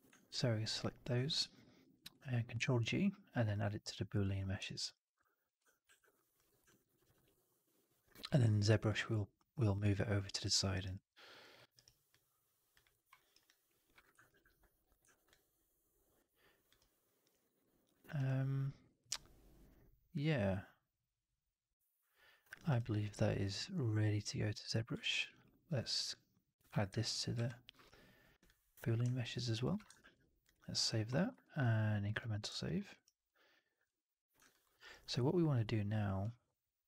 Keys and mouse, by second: 0.6 shift+click, 1.2 alt+middle click, 2.5 ctrl+g, 4.5 alt+right drag, 4.8 alt+right click, 4.9-5.3 drag, 5.7 ctrl+s, 6.6 middle drag, 6.7 right drag, 6.9 right drag, 7.1-7.9 drag, 8.0 middle drag, 8.2 right drag, 8.4-8.8 drag, 10.6 alt+right drag, 10.8-11.3 alt+drag, 11.4 alt+middle drag, 11.6 alt+right click, 12.0-12.6 alt+drag, 12.8 alt+middle drag, 13.1 alt+right drag, 13.4-13.9 alt+drag, 14.2 ctrl+s, 15.0 alt+right drag, 15.2-16.6 alt+drag, 16.7-17.4 alt+right drag, 17.5-17.8 alt+drag, 17.9 alt+right drag, 18.1-18.8 alt+drag, 20.0-22.4 alt+drag, 22.5 alt+right drag, 22.6 alt+right click, 22.8-24.8 alt+drag, 25.0 alt+middle drag, 25.2 alt+right drag, 25.9 click, 27.2 ctrl+g, 29.1 alt+right drag, 29.3 alt+right drag, 29.5 alt+click, 29.9 ctrl+s, 30.8 alt+drag, 31.3 ctrl+s, 32.5 alt+drag, 32.7 alt+middle drag, 32.8 alt+right drag, 33.1-33.7 alt+drag, 34.3 alt+drag, 34.5 alt+middle drag, 34.7 alt+right click.